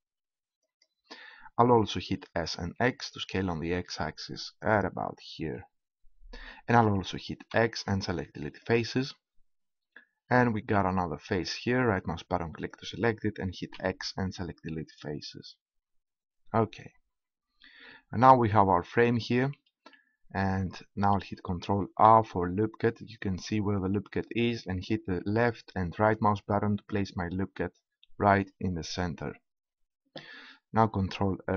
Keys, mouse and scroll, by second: 1.3-2.4 drag, 2.7-4.8 middle drag, 4.8-6.6 drag, 7.4 x, 12.5-13.9 right drag, 13.9 x, 22.7 ctrl+r.